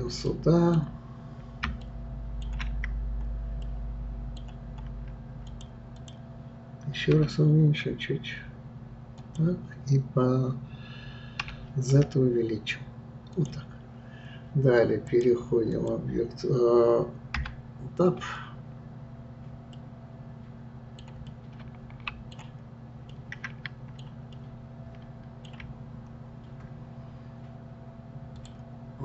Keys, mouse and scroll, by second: 0.3-3.0 middle drag, 3.0-3.6 scroll up 1, 3.6 scroll up 2, 3.6-5.5 middle drag, 5.5 click, 5.9 click, 7.1 s, 15.1-17.4 drag, 17.4 Tab, 18.2-18.8 scroll up 1, 19.0-19.7 scroll up 4, 19.7-25.9 middle drag, 25.9-26.3 scroll up 1, 28.4 click.